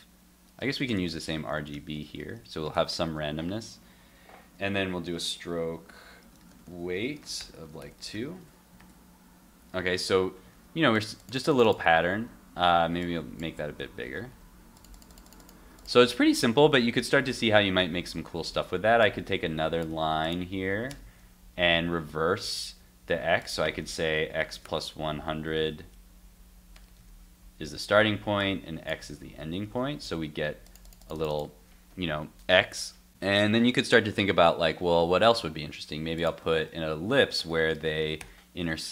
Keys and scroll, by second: 2.4 super+s, 8.1 super+s, 8.4 super+Tab, 8.8 super+r, 9.9 super+r, 10.5 super+r, 13.8 super+s, 14.0 super+Tab, 14.3 super+r, 18.1 super+Tab, 19.9 super+c, 21.1 super+v, 25.6 super+s, 29.0 super+x, 29.2 super+s, 29.6 super+Tab, 35.3 super+Tab.